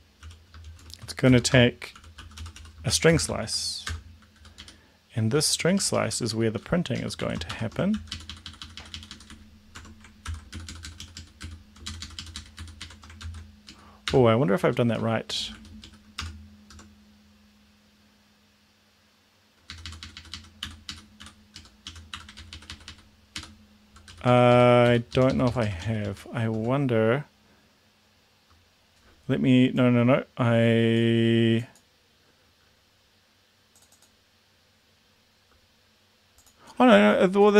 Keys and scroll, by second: 0.0-3.9 typing, 4.3 Down, 4.6 Up, 5.3 Down, 5.4 Down, 5.6 Down, 5.8 Down, 5.9 Down, 6.1 Down, 7.0 Down, 7.5 shift+Home, 7.9 ctrl+x, 8.1 Up, 8.2 Up, 8.6 Up, 8.8 Up, 8.9 Up, 9.1 Up, 9.8 Up, 10.2 ctrl+v, 10.5 Down, 10.7 Down, 10.9 Down, 11.0 Down, 11.2 Down, 11.8 shift+Up, 12.9 shift+Right, 13.2 ctrl+x, 13.7 Down, 14.0 BackSpace, 14.6 Up, 15.5 Down, 15.9 Down, 16.2 BackSpace, 16.7 Tab, 19.7 Up, 20.0 Up, 20.1 Up, 20.2 Up, 20.3 Up, 20.6 End, 20.9 Up, 21.5 End, 21.5 Down, 22.4 ctrl+Right, 23.9 Left, 24.1 Down, 24.3 Down, 24.5 Down, 25.1 End, 25.4 Left, 25.6 Left.